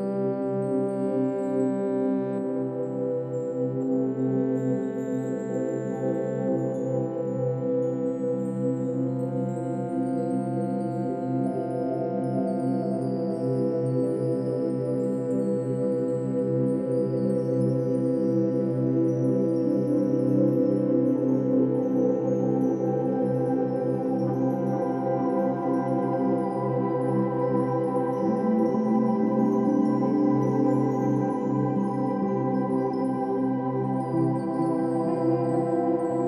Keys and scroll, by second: 4.2 space, 6.9 space, 7.8 space, 11.0 space, 16.1 ctrl+-, 16.4 ctrl+=, 17.7 ctrl+-, 19.0 ctrl+e, 20.4 ctrl+-, 20.9 ctrl+=, 21.8 ctrl+alt+shift+n, 21.9 ctrl+alt+g, 32.7 ctrl+alt+g, 33.1 ctrl+alt+n, 33.3 Escape.